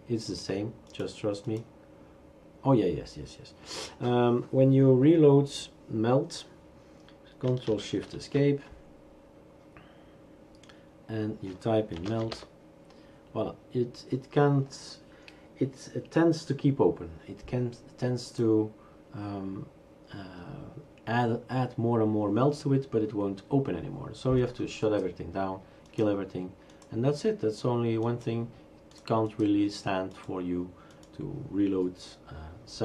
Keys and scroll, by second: 8.2 ctrl+shift+Escape, 11.8-12.8 typing.